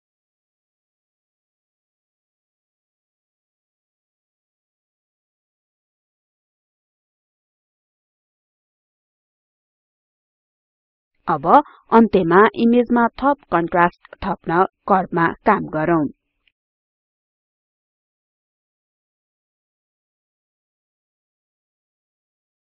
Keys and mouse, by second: 15.8 click, 16.8 click, 18.8-21.3 drag, 21.8-22.7 drag.